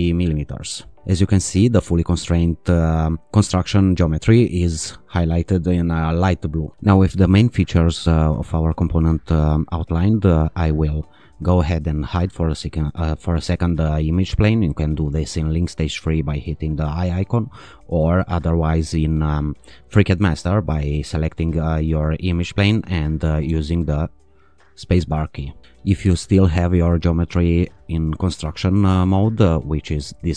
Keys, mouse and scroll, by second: 0.0-0.1 typing, 1.0 click, 7.9-10.0 drag, 10.5-11.9 drag, 14.9 click, 21.3 click, 23.4 space, 25.1 space, 27.7 click.